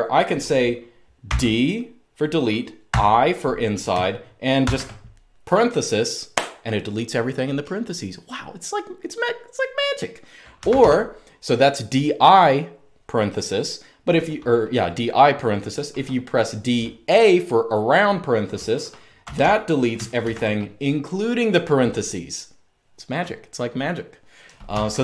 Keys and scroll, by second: 0.9 typing, 2.6 typing, 4.3 typing, 10.4 Escape, 10.5 u, 18.7-19.9 typing, 24.4 typing.